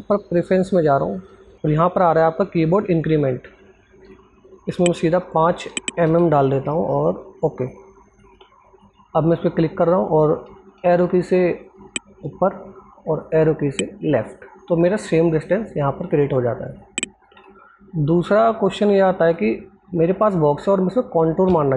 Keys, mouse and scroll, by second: 8.1 click, 12.8 click, 13.6 Left, 14.6 click, 17.0 alt+Tab, 17.9 scroll down 1, 18.6-18.9 scroll up 1, 18.9 click, 19.6-20.0 scroll up 1, 20.0 click.